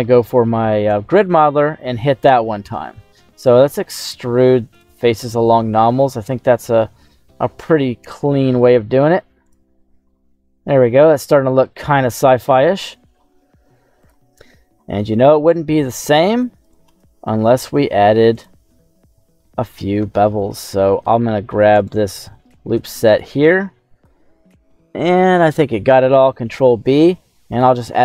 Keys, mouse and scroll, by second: 0.9 shift+middle click, 2.7 e, 3.3 right click, 3.5 q, 9.4 click, 9.7-10.2 scroll down 2, 10.0 middle click, 11.1 Tab, 11.5 middle click, 11.5 scroll down 1, 12.2 middle click, 16.6 right click, 16.8 Tab, 18.3 click, 19.1 middle click, 19.5-19.8 scroll up 1, 20.0 shift+middle click, 21.7 alt+shift+right click, 22.0 alt+shift+right click, 22.4 right click, 22.8 alt+shift+right click, 24.0-25.4 middle drag, 24.0 scroll down 1, 26.4 ctrl+b, 27.9 click.